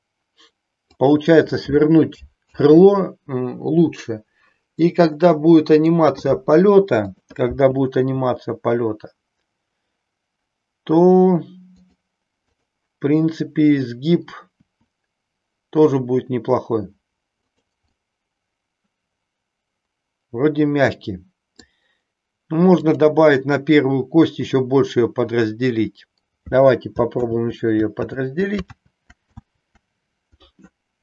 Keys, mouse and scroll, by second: 2.4 ctrl+z, 4.9-5.9 middle drag, 7.0-8.5 drag, 8.6 r, 14.5 r, 18.0-21.5 middle drag, 22.8-24.5 drag, 27.1 ctrl+z, 28.0 ctrl+z, 28.6 ctrl+z, 29.3 ctrl+z.